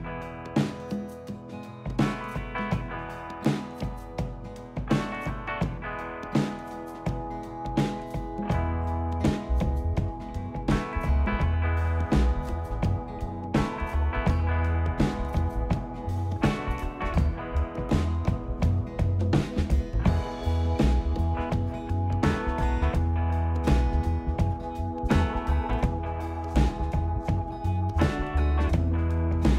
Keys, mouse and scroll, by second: 0.5 middle click, 1.6 middle click, 3.6 click, 5.6 click, 6.5 Delete, 7.7 click, 9.2 click, 9.7 middle click, 9.7 click, 10.4 e, 10.8 z, 12.3-13.2 typing, 14.4 click, 15.1 click, 16.4 click, 17.3 Delete, 19.1 click, 21.6 click, 22.2 click, 23.9 click, 24.8 click, 27.4 click, 29.2 click.